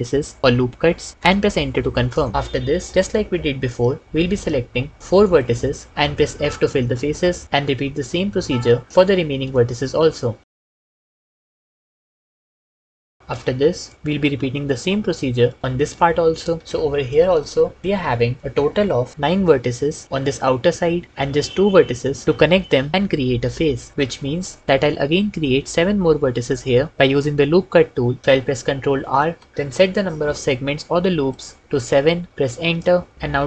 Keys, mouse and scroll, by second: 1.1 KP_Enter, 6.8 f, 9.7 f, 11.3 f, 11.9 shift+f, 12.8 shift+f, 13.8 middle click, 17.2 shift+middle click, 17.8 middle click, 29.0 ctrl+r, 29.7 s, 30.6 7, 32.5 Return.